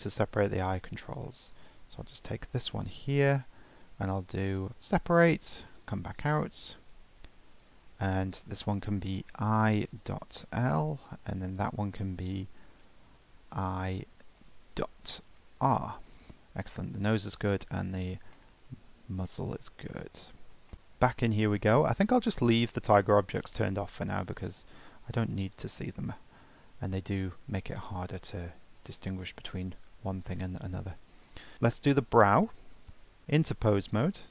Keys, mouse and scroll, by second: 0.7 Tab, 1.6 click, 2.5 l, 4.7 p, 5.6 Tab, 6.2 click, 7.1 F2, 8.6 BackSpace, 8.7 BackSpace, 11.6 click, 12.8 F2, 16.6-17.1 drag, 17.4-18.3 drag, 18.3-18.8 shift+middle drag, 18.8-19.2 scroll up 1, 19.2-19.7 shift+middle drag, 19.7 scroll up 1, 19.9-20.2 shift+middle drag, 20.2-20.7 scroll down 3, 20.7 Tab, 21.4-21.7 scroll up 1, 21.7-23.5 shift+middle drag, 23.5 click, 25.4 click, 26.4-27.0 scroll down 3, 27.0-29.3 scroll up 1, 29.3-31.3 drag, 31.3-31.7 scroll down 5, 31.7 shift+middle click, 32.0-32.5 scroll up 2, 32.5 shift+middle click, 33.2 Tab, 33.9 click.